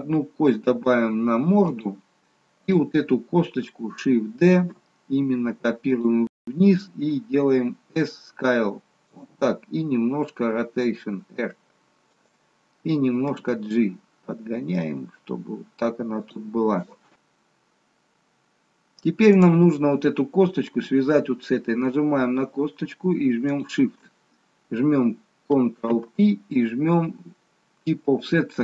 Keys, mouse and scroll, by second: 2.8 click, 4.8 shift+d, 7.3 s, 10.2 r, 13.2 g, 19.2 click, 23.3 shift+click, 25.7 ctrl+p.